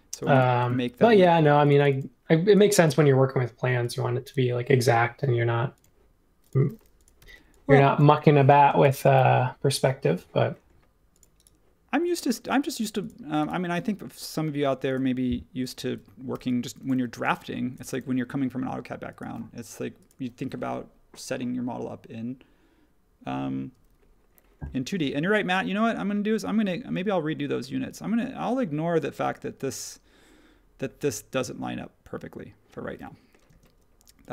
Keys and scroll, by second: 7.2 p, 8.5 space, 16.3 p, 17.3 space, 33.4 space.